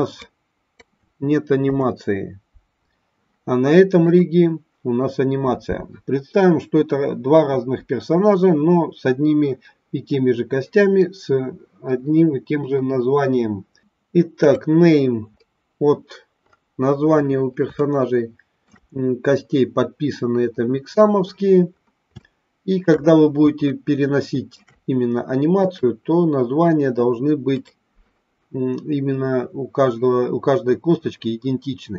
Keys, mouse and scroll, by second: 0.2-0.7 drag, 2.1 Delete, 4.1 click, 14.4 click, 17.7-18.6 shift+middle drag, 22.1-22.9 shift+middle drag, 23.6-24.5 shift+middle drag, 25.5 click.